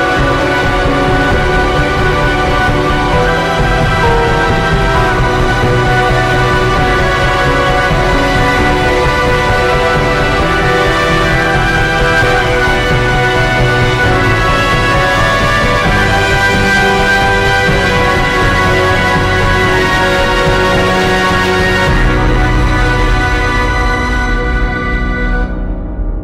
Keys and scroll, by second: 0.3 ctrl+t, 2.0 ctrl+t, 4.1 ctrl+t, 9.7 ctrl+s, 10.3 ctrl+0, 11.6-12.8 typing, 19.8 ctrl+t, 21.1 b, 24.1 ctrl+shift+e, 24.9 m, 25.2 Return.